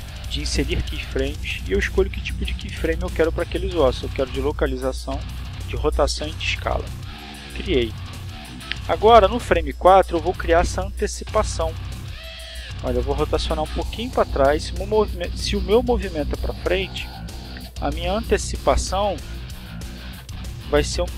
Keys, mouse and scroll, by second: 4.5 click, 6.0 click, 8.2 right click, 10.8 r, 11.8 click, 12.6 right click, 14.8 r, 17.4 click, 18.0 right click, 18.6 r, 19.3 click, 20.3-21.1 drag.